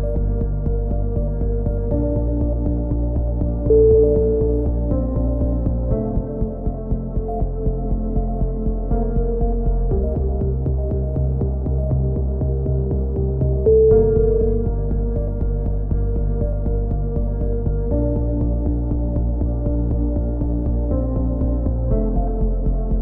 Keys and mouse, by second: 1.7 z, 2.3 click, 3.9 shift+space, 6.4 click, 6.9 middle click, 7.2 click, 7.6 middle click, 7.7 click, 7.7 right click, 9.4-10.4 right drag, 9.9-10.9 drag, 10.9 right click, 11.4-12.5 drag, 14.3 right click, 14.8 click, 18.5 a, 18.8 middle click, 19.4 click, 19.9 middle click, 20.3 click, 20.9 middle click, 21.3 click, 22.0 a, 22.9 ctrl+r.